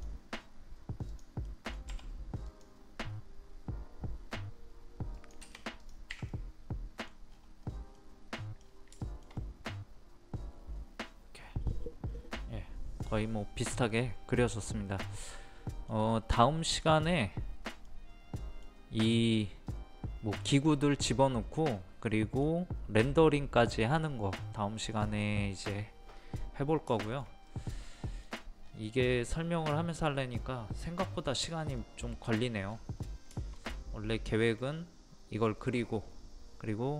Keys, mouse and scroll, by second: 1.4 middle click, 2.4 click, 6.3 middle click, 7.3-7.6 scroll up 1, 7.9 middle click, 8.6 scroll down 1, 9.0-16.2 shift+middle drag, 16.2-19.3 middle drag, 19.3-23.2 middle drag, 23.2 middle click, 26.9 shift+middle click, 28.6-28.9 scroll up 1, 29.1-32.6 middle drag, 32.6-33.0 scroll down 1, 33.3-35.2 shift+middle drag.